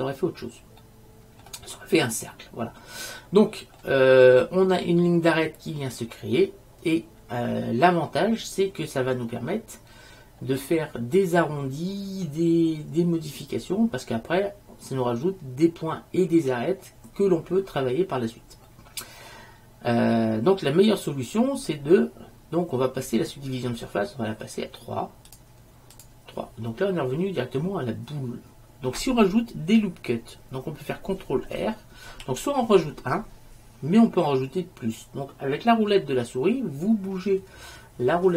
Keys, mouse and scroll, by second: 0.9-4.3 middle drag, 4.7-7.0 middle drag, 8.6-10.7 middle drag, 15.4-18.1 middle drag, 18.8-20.8 middle drag, 25.4-27.8 drag, 32.2 ctrl+r.